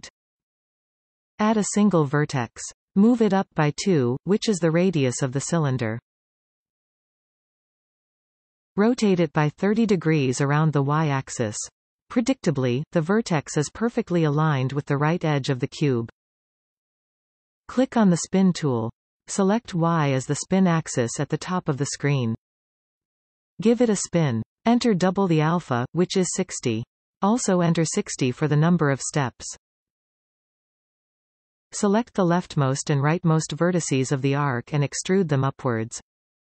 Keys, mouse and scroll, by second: 1.0 shift+a, 4.6-5.1 scroll up 2, 5.6 g, 9.3 r, 19.0 click, 20.4 click, 23.2-27.8 drag, 29.0 shift+Tab, 31.5-31.8 scroll up 2, 33.4 shift+click, 34.3 scroll up 1, 35.0 shift+middle click, 35.4 scroll up 2, 35.8 scroll down 1.